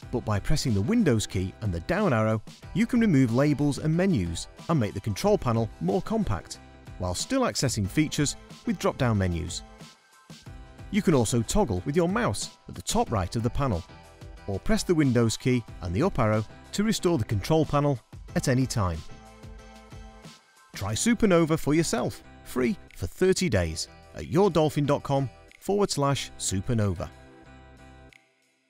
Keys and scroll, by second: 3.2 super+Down, 14.3 super+Up, 15.9 super+Up.